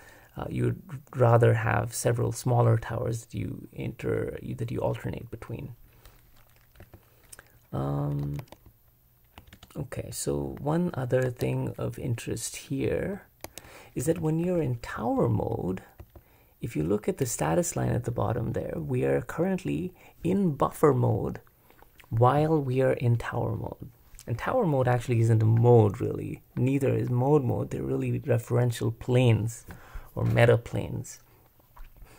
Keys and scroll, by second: 6.8 h, 8.4 ctrl+Escape, 9.5 super+Return, 11.3 super+Escape, 13.4 ctrl+Escape, 14.1-16.0 typing.